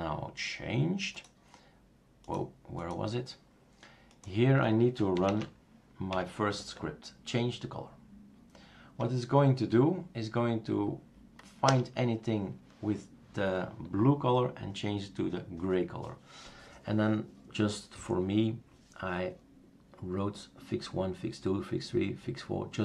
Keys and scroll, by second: 5.1-8.2 typing, 11.6 Return.